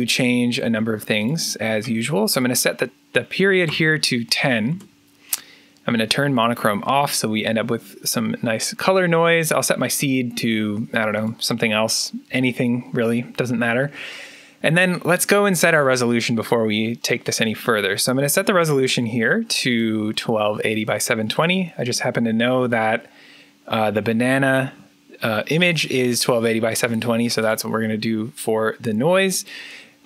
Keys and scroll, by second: 3.5 0, 4.6 Return.